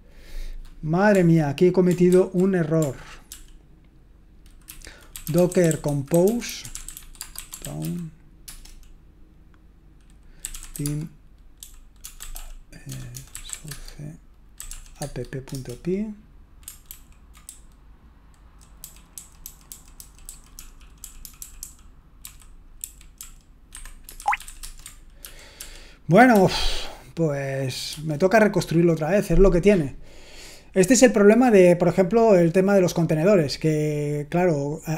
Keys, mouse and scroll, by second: 2.1 ctrl+c, 3.3 ctrl+p, 4.7 ctrl+n, 4.9-8.3 typing, 8.4 Return, 10.5-15.5 typing, 16.9 ctrl+d, 17.2-25.2 typing, 23.7 Escape, 25.2 ctrl+p, 28.1 Return.